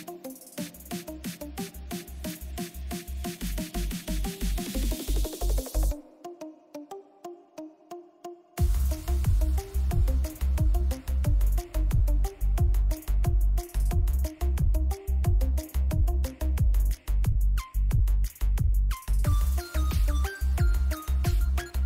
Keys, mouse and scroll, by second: 2.0 ctrl+=, 2.8-4.2 drag, 4.2 ctrl+=, 7.4 ctrl+j, 8.2 click, 10.2-11.5 drag, 11.9-14.2 drag, 14.2-18.4 drag.